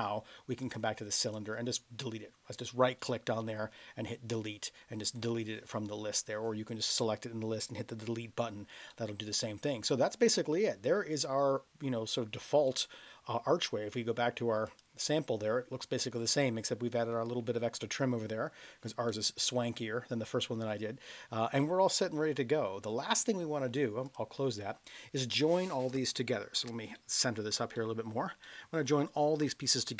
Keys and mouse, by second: 0.7 click, 1.2-4.5 right drag, 8.9-10.5 middle drag, 11.3-12.1 middle drag, 12.6-13.3 middle drag, 14.6 click, 19.1-19.6 middle drag, 24.0 click, 25.9 space, 26.9-27.4 middle drag, 27.8 middle click, 28.4-29.2 middle drag.